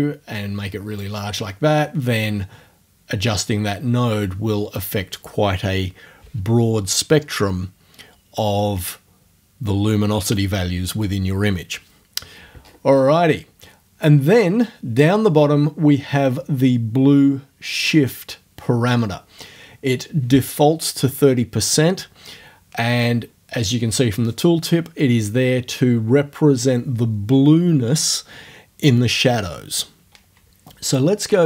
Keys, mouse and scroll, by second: 1.0-5.3 drag, 12.6-13.4 scroll down 2.